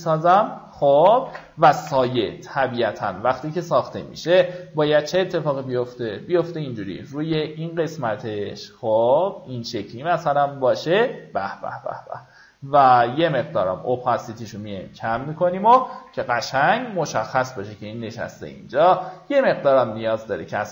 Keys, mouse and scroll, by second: 0.3 alt+right click, 0.7 click, 1.6 ctrl+d, 3.1-4.3 drag, 5.6-11.3 ctrl+drag, 13.6 KP_3, 18.6 click.